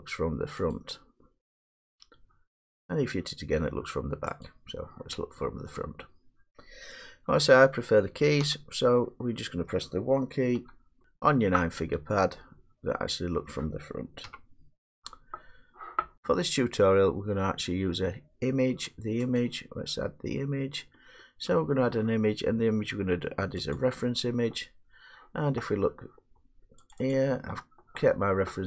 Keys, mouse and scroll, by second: 0.7 click, 4.6 click, 8.2 middle click, 8.4 1, 10.5 1, 12.0 middle click, 12.1 middle click, 13.4 middle click, 14.2 1, 19.3 click, 23.7 click, 26.9 click, 27.1 click.